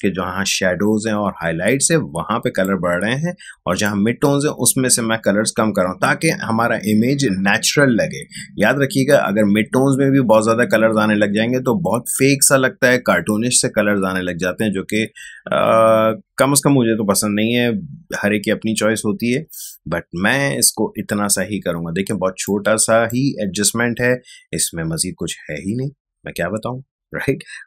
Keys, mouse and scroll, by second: 22.4-27.6 drag.